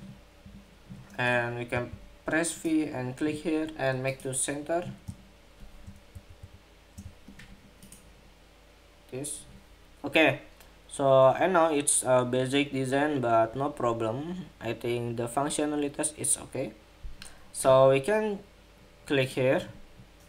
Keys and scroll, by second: 0.2 Escape, 5.8 alt+shift+Up, 6.1 alt+shift+Up.